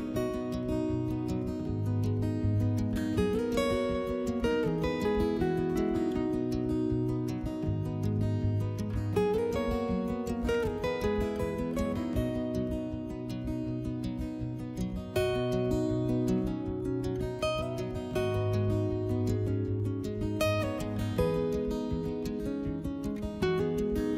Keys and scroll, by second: 4.2 3, 8.2 s, 11.2 s, 15.2 s, 22.4 s.